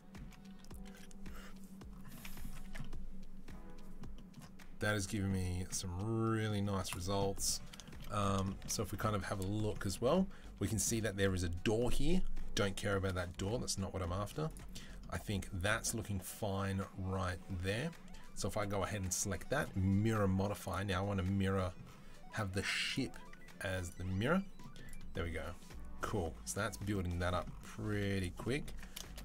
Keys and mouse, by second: 2.5 Tab, 5.5-14.4 middle drag, 6.7 click, 6.7 right click, 14.3 click, 14.3-16.2 right drag, 16.2 right click, 16.4-29.2 right drag, 19.4-22.8 drag, 19.4-22.8 middle drag, 28.5 Tab.